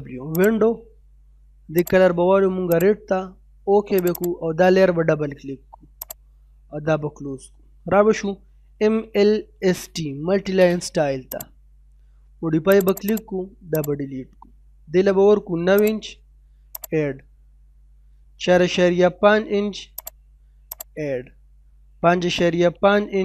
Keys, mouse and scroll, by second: 0.3 click, 6.6 middle click, 7.8-9.8 typing, 11.3 click, 15.0 9, 15.7 click, 18.0 4, 19.9 click, 21.9 typing.